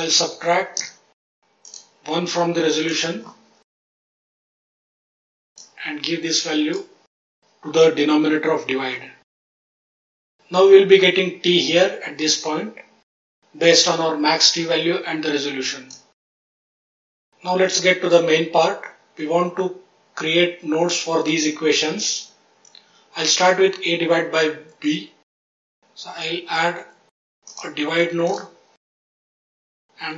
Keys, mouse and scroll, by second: 0.6 click, 1.6 click, 2.8 click, 4.1 click, 4.6 click, 4.9 click, 5.5 click, 9.6 middle click, 13.1 click, 15.8 click, 16.3 middle click, 16.5-17.3 scroll down 3, 25.6 shift+a, 28.8 click, 29.4 click.